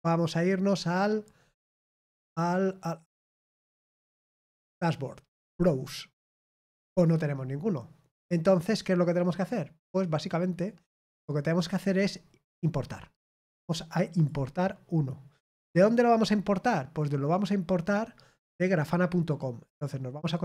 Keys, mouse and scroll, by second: 5.4 click, 11.5 click, 14.1 click, 19.7 click.